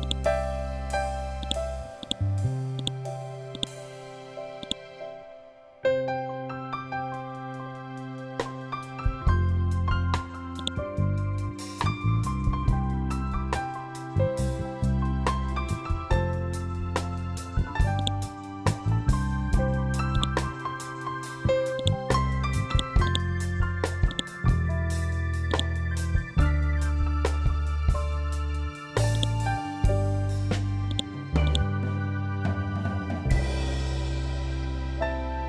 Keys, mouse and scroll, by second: 0.9 ctrl+click, 3.5 scroll down 1, 4.1 click, 4.7 scroll up 1, 9.1 scroll down 1, 10.0 click, 13.5 scroll up 1, 17.4 click, 17.9 scroll down 1, 19.6 right click, 21.2 click, 22.5 right click, 23.6-33.8 drag, 33.8 ctrl+Home.